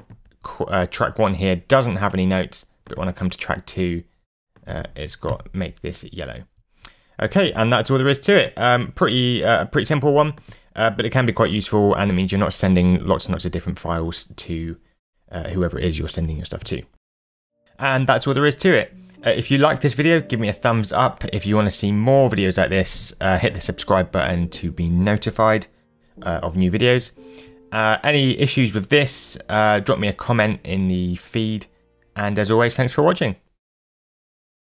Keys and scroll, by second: 5.2 w.